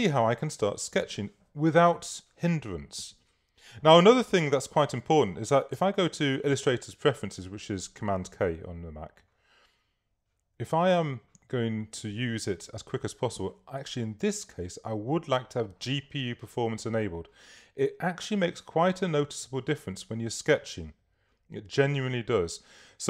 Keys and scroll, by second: 5.7 super+k.